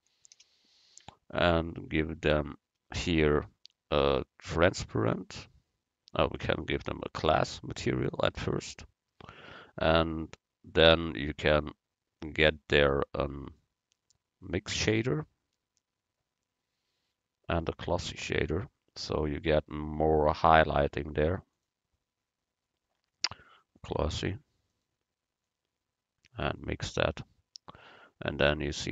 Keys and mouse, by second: 4.9-6.8 drag, 11.5-13.3 drag, 13.5-15.4 drag, 21.6 click, 25.5-27.5 drag.